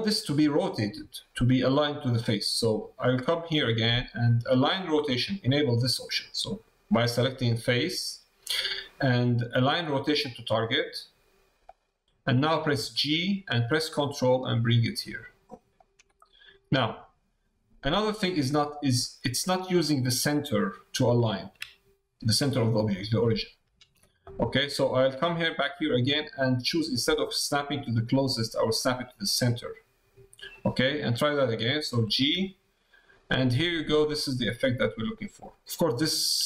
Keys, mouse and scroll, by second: 4.3-12.0 drag, 16.1 click, 18.5 click, 24.2 middle click, 25.6-30.5 drag.